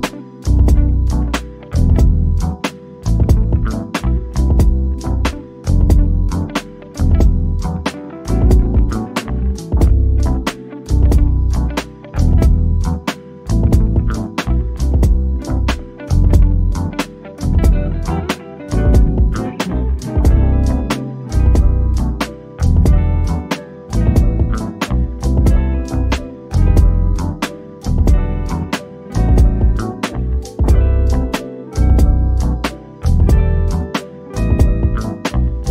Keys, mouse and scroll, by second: 4.9-5.4 scroll down 1, 6.6 click, 8.8-9.2 scroll down 1, 9.9 Escape, 11.0 o, 11.5 click, 12.2 scroll down 1, 12.4 middle click, 13.2 click, 13.8 middle click, 14.4-17.5 drag, 19.5 click, 23.3 click, 23.9-24.3 scroll up 1, 25.8 click, 29.0-30.3 drag, 30.3-31.1 scroll down 1, 31.7 middle click, 32.1-33.4 scroll up 1.